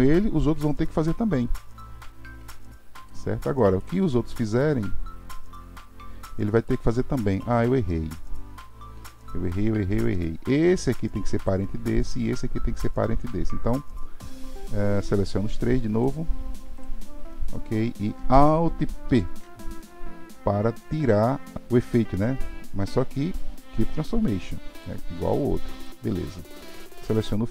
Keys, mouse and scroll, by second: 3.8 click, 4.3 g, 10.8 click, 11.4-14.4 drag, 15.6 click, 16.8-19.1 shift+drag, 19.1 alt+p, 25.8 click, 26.8 click.